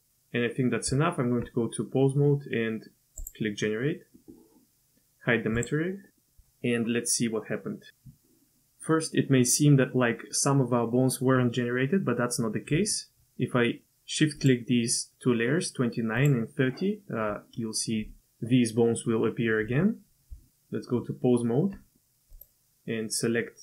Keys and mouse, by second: 0.9 Tab, 5.6 click, 6.2 middle click, 14.4 shift+click, 16.2 shift+click, 20.3 Tab, 22.3 click.